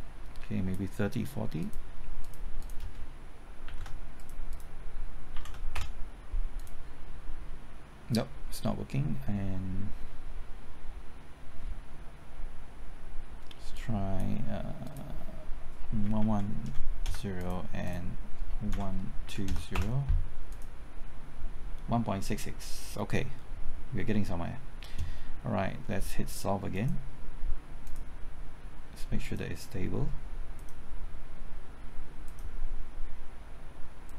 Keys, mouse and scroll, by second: 3.6 KP_3, 3.7 KP_0, 4.1 click, 5.3 KP_4, 5.4 KP_0, 5.7 Return, 6.5-14.7 drag, 14.0 KP_Enter, 16.0 KP_1, 17.0 KP_0, 17.4 click, 18.7 KP_1, 19.2 KP_2, 19.4 KP_0, 19.7 KP_Enter, 20.5-27.7 drag.